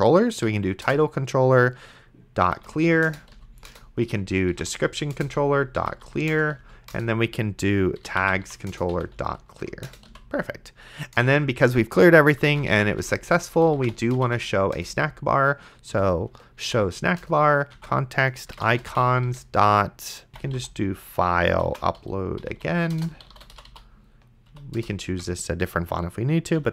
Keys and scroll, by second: 0.5 Down, 0.9 Return, 2.2-6.6 typing, 3.1 Return, 3.7 Return, 6.3 Return, 6.9 Return, 7.8-10.6 typing, 11.2 Return, 12.4-17.0 typing, 17.2 Return, 17.8 Tab, 18.5-24.2 typing, 24.5 Down, 24.8 Return, 25.1 Tab, 26.6 ;.